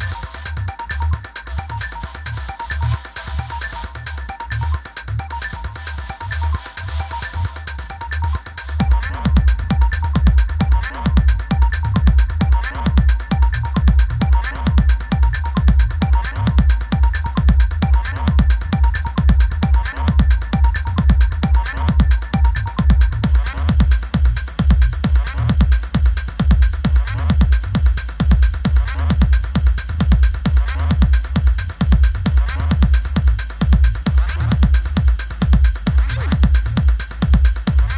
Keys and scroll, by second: 5.3 super+-, 6.1 super+-, 6.8 i, 12.9 super+=, 19.9 super+-, 21.6 i, 24.5 super+[, 26.2 Down, 27.1 super+[, 29.8 super+-, 32.7 super+=, 36.1 super+=.